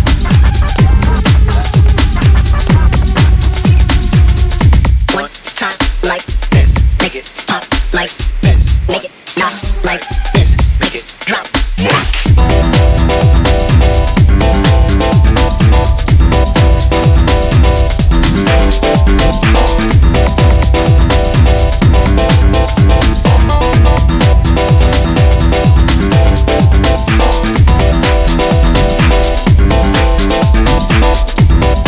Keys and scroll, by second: 1.2 a, 2.9 1, 4.6 typing, 8.0 s, 10.4-11.9 typing, 26.0-27.3 typing.